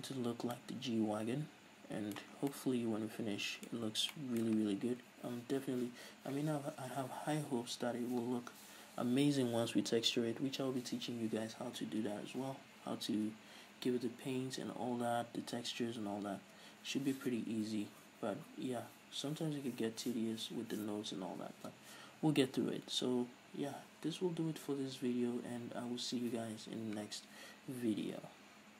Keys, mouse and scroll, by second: 0.6-1.0 scroll up 2, 2.7 scroll down 2, 4.1-4.6 scroll up 2.